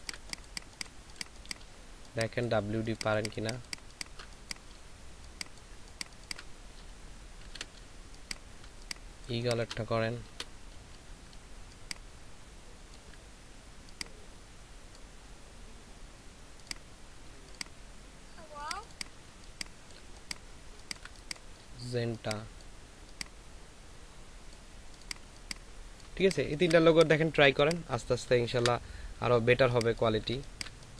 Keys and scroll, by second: 0.9 ctrl+space, 7.4 x, 8.0 space, 11.3 ctrl+c, 19.3 ctrl+space, 20.6 ctrl+alt+space, 25.2 ctrl+space, 26.4 ctrl+alt+space, 28.6 Delete, 29.6 ctrl+space, 30.2 ctrl+space.